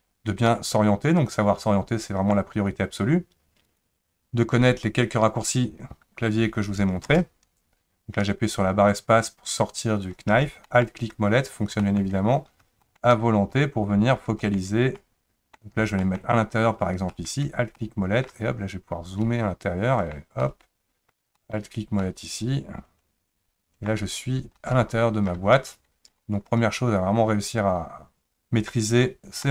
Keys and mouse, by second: 10.6 alt+middle click, 11.8 alt+middle click, 12.8 alt+middle click, 14.5 alt+middle click, 15.0 middle click, 16.1 alt+middle click, 17.1 alt+middle click, 17.7 middle click, 19.2 middle click, 20.5 middle click, 21.4 alt+middle click, 22.0-23.9 middle drag, 24.5 shift+middle click, 26.4-29.4 middle drag.